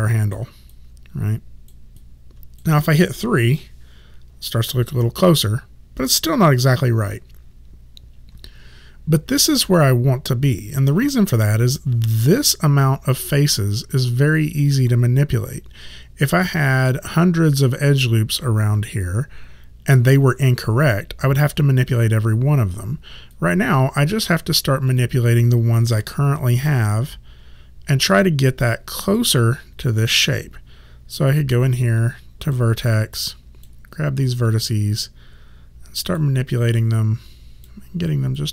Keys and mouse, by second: 0.8 alt+right click, 3.5 3, 23.4 right click, 25.0 click, 26.0 w, 26.7 click, 31.4 right click, 33.2 click, 36.8 click.